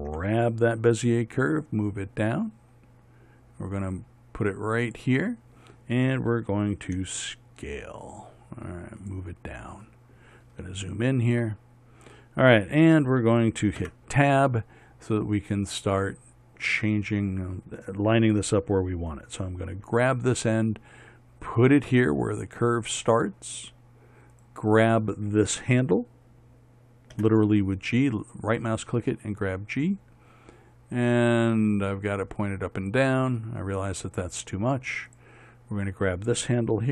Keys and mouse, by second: 0.6 g, 7.4 s, 14.3 Tab, 20.3 g, 24.8-27.6 drag, 27.6 g, 35.6-36.9 drag.